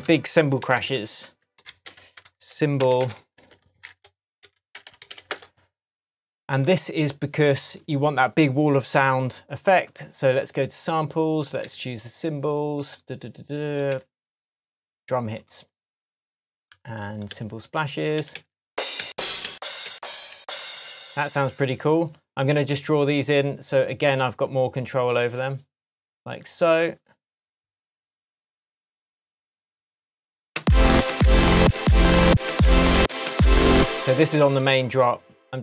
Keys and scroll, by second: 0.6 super+t, 1.9 shift+super+r, 2.2 shift+super+c, 2.7-4.7 typing, 11.6 Left, 13.9 Left, 17.3 Right, 30.6 space.